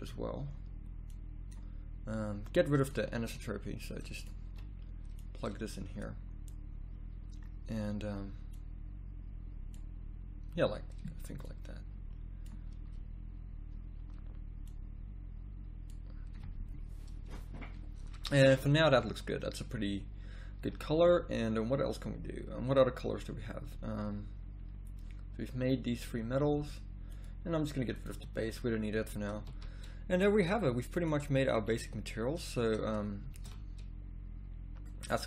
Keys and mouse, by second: 20.6 z, 20.8 z, 29.5 a, 33.5 shift+z.